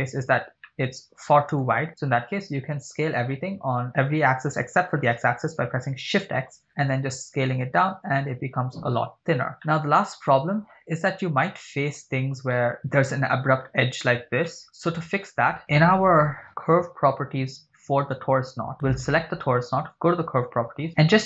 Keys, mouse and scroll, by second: 0.7-1.7 middle drag, 3.1 s, 4.5 shift+x, 9.5 click, 9.5 scroll up 3, 9.7-10.9 middle drag, 10.1-11.6 scroll up 7, 11.5-12.2 middle drag, 12.5 middle click, 14.5-15.2 middle drag, 18.2 right click, 20.0 click, 20.7 scroll down 2, 21.0-21.2 scroll up 1.